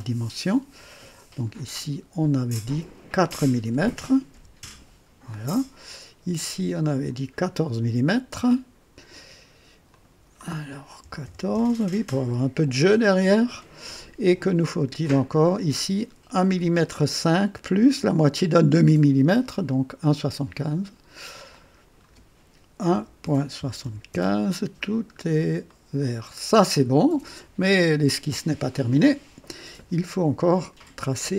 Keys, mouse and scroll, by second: 1.1 click, 3.2 click, 4.3 typing, 4.5 KP_Enter, 6.7 click, 9.8 click, 11.0 KP_1, 11.2 KP_4, 11.4 KP_Enter, 15.3 click, 16.4-16.7 scroll up 2, 21.4 click, 22.8 KP_1, 23.1 KP_Decimal, 23.5 KP_7, 23.7 KP_5, 24.0 KP_Enter, 25.1 scroll down 2, 25.1 typing, 25.6-26.4 right drag, 25.6 click, 26.5 scroll down 2, 28.6 right click, 28.9 click.